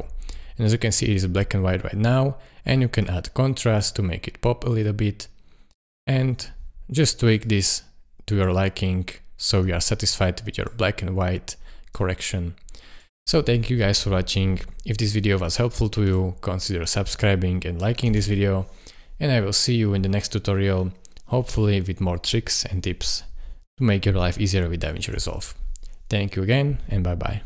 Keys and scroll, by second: 18.1 space, 25.2 space.